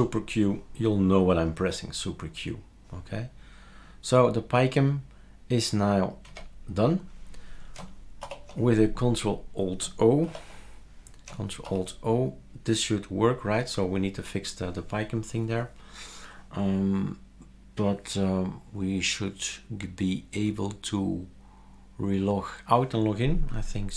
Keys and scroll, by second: 6.2 super+q, 8.2 ctrl+alt+o, 10.2 ctrl+alt+t.